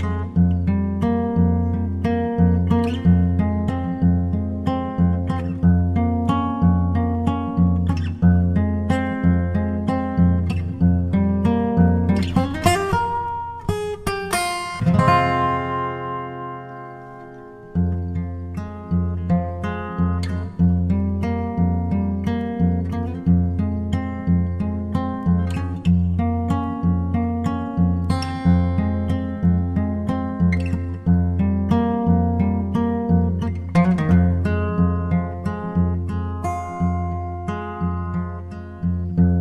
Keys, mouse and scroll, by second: 3.2-4.9 drag, 6.1-8.1 drag, 10.4-12.0 drag, 13.6 Tab, 15.8-17.5 drag, 17.5-19.4 right drag, 18.2-20.1 middle drag, 19.0 ctrl+Tab, 21.4-23.2 right drag, 22.9 g, 28.7-30.5 drag, 29.5-31.3 right drag, 30.5 g, 33.7-35.6 drag, 34.5-36.7 right drag, 35.4 g, 38.3-39.4 drag, 38.9-39.4 right drag, 39.2 g.